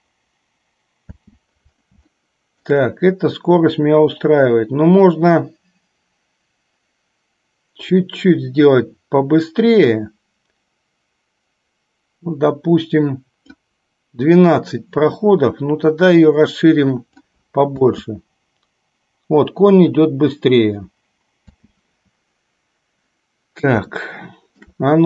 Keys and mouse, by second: 1.4 space, 2.2 shift+middle click, 8.1-13.6 drag, 14.7-17.5 drag, 18.0 space, 21.7 space, 24.1-24.9 shift+middle drag.